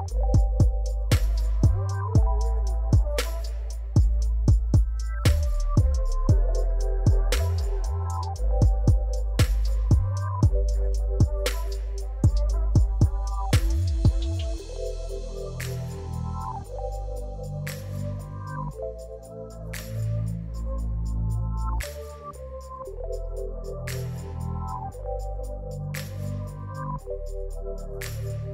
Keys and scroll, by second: 0.1 r, 0.2 z, 0.7 alt+a, 3.1 /, 4.1-6.0 typing, 7.0-9.1 typing, 11.4 ctrl+j, 11.7 alt+a, 16.5 Tab, 17.5 shift+z, 18.8 b, 20.7 r, 20.8 z, 21.3 g, 21.4 z, 22.8 ., 23.5 Tab, 23.6 shift+z, 26.5 alt+a.